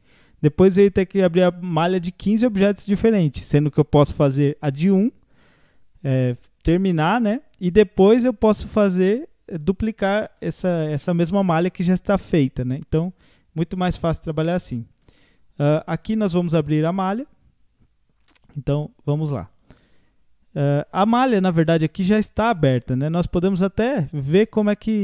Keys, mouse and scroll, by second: 13.0-15.0 middle drag, 15.0 Tab, 15.4 scroll up 4, 15.9-18.9 middle drag, 20.8 scroll up 3, 21.4 scroll down 1, 23.2-25.0 drag.